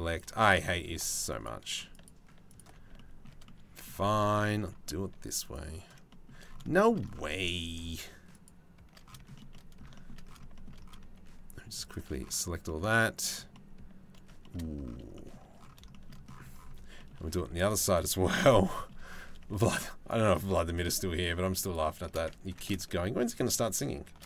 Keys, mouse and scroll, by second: 1.6 alt+shift+click, 2.1 alt+shift+middle click, 2.6-3.6 shift+middle drag, 3.7 shift+middle click, 4.5 shift+middle click, 5.0 alt+shift+click, 5.7 shift+click, 6.4 shift+click, 9.0 shift+right click, 9.1 middle click, 10.0 shift+middle click, 10.6-11.7 alt+shift+middle drag, 12.3 middle click, 13.1 shift+middle click, 14.0 shift+middle click, 14.8 middle click, 15.5 shift+middle click, 22.1 ctrl+z, 24.1 ctrl+z.